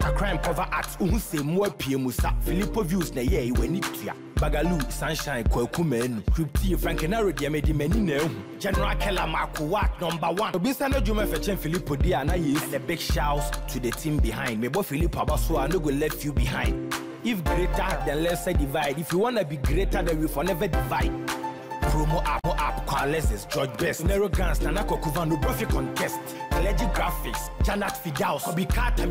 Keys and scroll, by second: 9.0 ctrl+t.